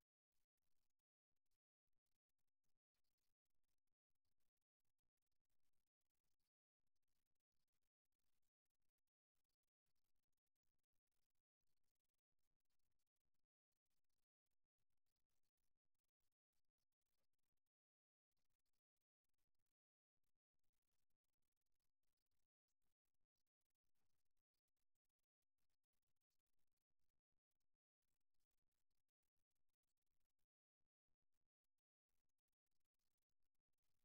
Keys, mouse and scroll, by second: 3.9-6.7 middle drag, 6.7-8.2 right drag, 8.2 middle click, 8.9 click, 9.0-11.2 middle drag, 10.6 g, 15.7-20.6 right drag, 20.2 g, 23.6-25.6 middle drag, 26.3-28.6 middle drag, 31.3 KP_3.